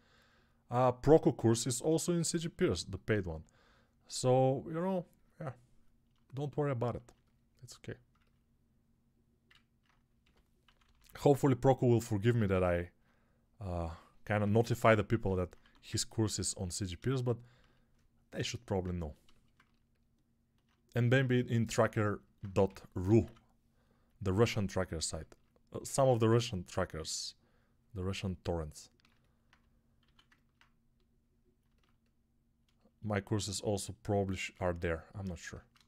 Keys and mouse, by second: 10.1 g, 10.5 ], 10.7 ], 10.8 ], 12.3 alt+q, 15.5 1, 22.5 g, 22.9 ], 23.1 ], 25.9 x, 29.9 alt+q, 35.2 alt+q.